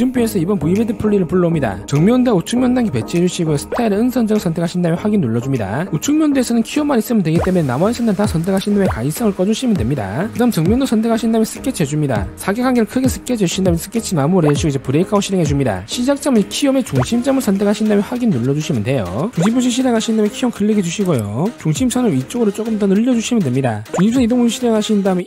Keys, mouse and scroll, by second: 3.7 click, 4.9 click, 6.0 click, 7.4 right click, 8.3 click, 8.8 right click, 9.8 click, 10.0 click, 11.0 click, 11.8 click, 12.1 click, 12.4 click, 13.0 3, 13.2 click, 13.9 click, 14.4 right click, 15.3 click, 18.0 click, 18.9 click, 20.5 click, 21.4 click, 22.5-23.8 drag, 25.1 click.